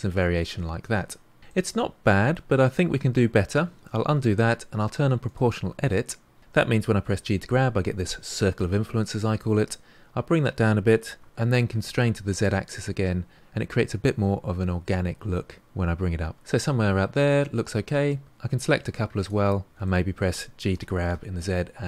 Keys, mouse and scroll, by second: 1.2 scroll up 2, 1.4-3.8 shift+middle drag, 3.8 ctrl+z, 5.2 click, 7.0 g, 16.6-18.4 middle drag, 18.4-19.7 drag, 19.8 middle click, 20.7 g.